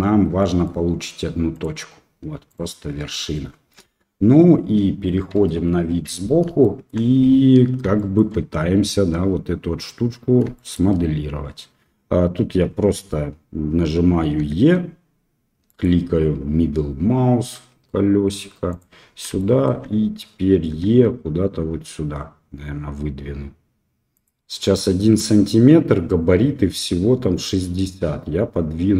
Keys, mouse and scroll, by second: 0.3 middle click, 1.5 click, 3.8 KP_1, 6.6 shift+middle click, 8.1 shift+click, 10.7 shift+click, 14.3 e, 19.3 shift+middle click, 20.7 e.